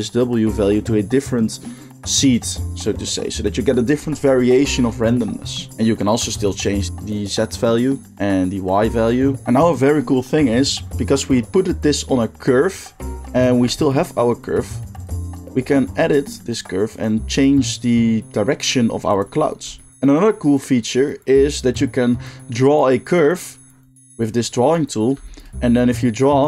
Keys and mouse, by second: 8.1 shift+middle click, 8.1-9.4 shift+drag, 9.4-13.3 middle drag, 13.3 click, 13.5 Tab, 13.5-14.9 middle drag, 14.9 click, 15.0-23.0 shift+middle drag, 15.9 g, 23.0-26.4 drag.